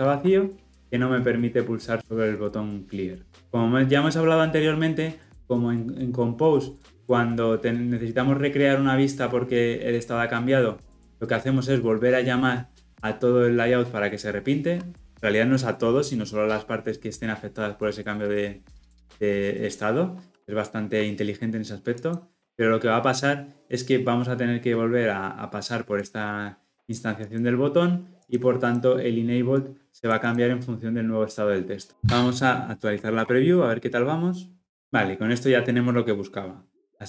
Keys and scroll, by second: 0.1 ctrl+alt+l, 0.4 ctrl+alt+o.